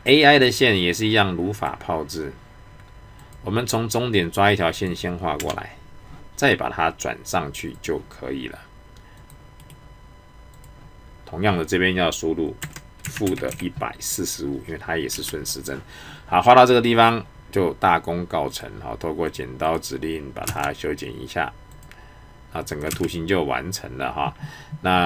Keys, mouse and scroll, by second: 1.6 click, 7.8 click, 9.6 right click, 10.5 click, 18.5 click, 20.4 space, 21.7 click, 22.9 space.